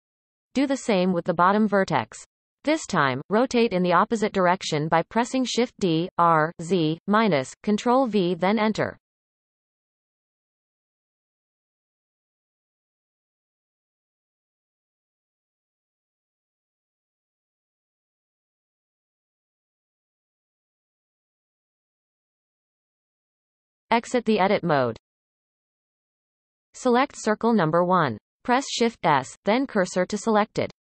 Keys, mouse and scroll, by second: 1.9-2.9 scroll down 1, 2.9-4.5 shift+middle drag, 4.5-5.5 scroll up 3, 5.5 click, 5.9-6.6 scroll down 1, 6.6-7.4 shift+middle drag, 7.4 shift+d, 10.2 e, 11.8-12.2 shift+middle drag, 12.2-12.8 scroll up 4, 13.6 click, 14.0 shift+click, 14.4 x, 15.6 click, 16.0 shift+drag, 16.8 f, 17.6 click, 18.0 shift+click, 18.9 f, 19.4-20.9 scroll down 6, 22.0-22.6 scroll down 3, 22.6-23.6 shift+middle drag, 23.6 Tab, 26.3-27.5 shift+middle drag, 27.5 click, 28.4 shift+s.